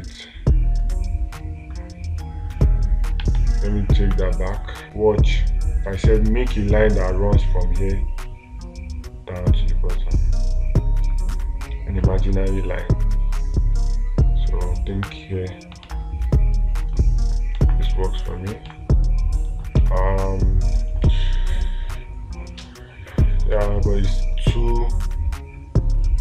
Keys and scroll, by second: 3.6 ctrl+z, 16.3 ctrl+space, 18.0 space, 19.1 space, 24.0 space.